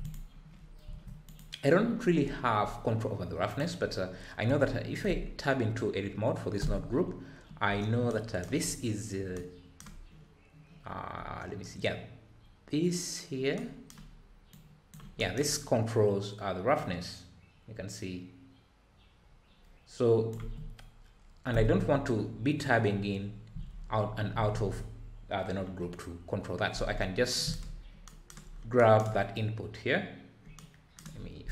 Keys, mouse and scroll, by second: 0.1 click, 2.2 `, 14.5-19.9 drag.